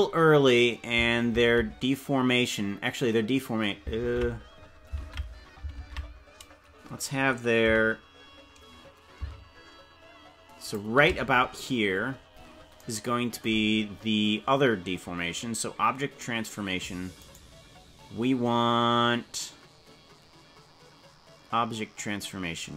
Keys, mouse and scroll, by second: 1.4 ctrl+Tab, 4.0 ctrl+Tab, 5.0 ctrl+Tab, 5.8 ctrl+Tab, 7.6 g, 12.0-12.8 scroll up 8, 17.4 right click.